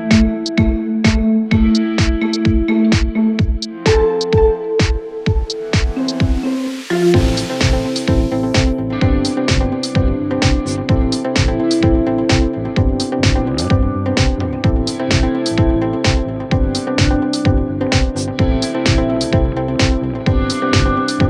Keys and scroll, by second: 0.6 ctrl+k, 5.5-6.6 typing, 7.2 Down, 7.7 Return.